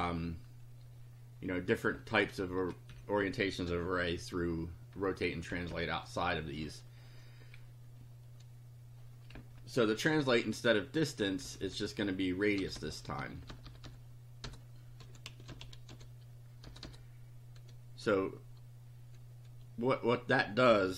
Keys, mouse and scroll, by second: 1.9 Left, 3.6 t, 5.5 Down, 9.3 Up, 10.1 Right, 11.4 Left, 12.5 BackSpace, 14.5-17.4 typing, 20.6-20.9 typing.